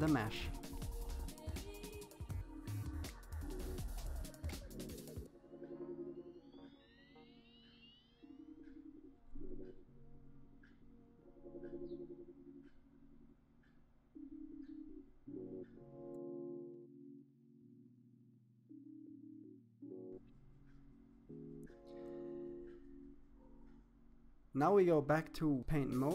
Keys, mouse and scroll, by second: 0.0 middle click, 0.2 KP_7, 0.4 middle click, 0.7 KP_7, 1.0 click, 1.4 middle click, 1.6 KP_7, 1.7 shift+middle click, 2.3 click, 3.9 click, 4.4 KP_3, 4.8 click, 5.9 click, 7.2 click, 7.5 middle click, 7.9 click, 8.5 middle click, 9.0 middle click, 9.4 click, 9.8 KP_7, 10.0 click, 11.1 shift+middle click, 11.6 click, 12.3 click, 13.1 click, 13.8 click, 14.1 KP_3, 14.4 click, 15.1 click, 15.6 click, 16.2 click, 16.5 KP_3, 16.9 click, 17.8 click, 18.2 click, 18.8 click, 19.4 click, 19.8 middle click, 19.9 scroll down 1, 20.0 middle click, 20.8 click, 22.0-25.7 drag.